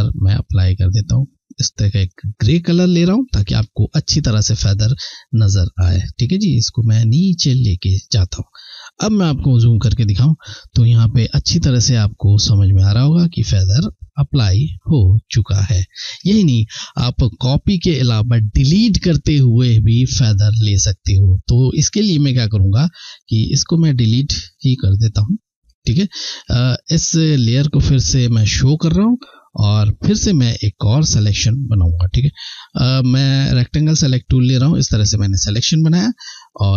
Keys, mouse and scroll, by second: 2.8 ctrl+,, 5.4 click, 8.6 ctrl+scroll up 1, 11.0-11.8 ctrl+scroll down 1, 11.8 ctrl+scroll up 1, 13.2 ctrl+scroll down 1, 14.5-14.8 ctrl+scroll up 3, 15.2-15.8 ctrl+scroll down 1, 21.6 click, 27.0 ctrl+scroll down 1, 28.3-28.9 scroll up 2, 29.0 ctrl+scroll down 1, 31.9 click, 33.2 shift+click, 36.2 click.